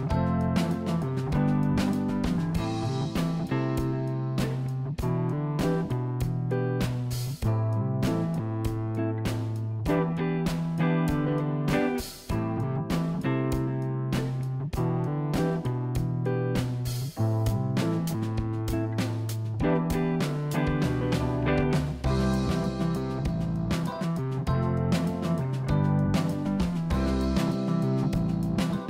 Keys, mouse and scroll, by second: 0.7 click, 1.8 click, 3.4 shift+d, 8.2 r, 13.5 r, 20.5 click, 21.1 click, 21.9 g, 24.1 click, 25.0 click, 26.0 g.